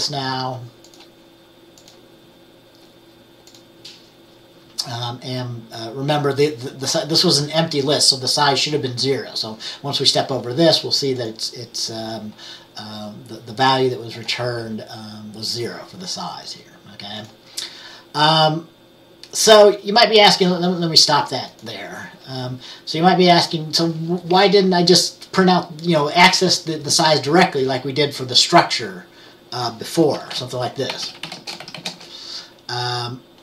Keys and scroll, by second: 30.5 Return, 30.8-32.4 typing.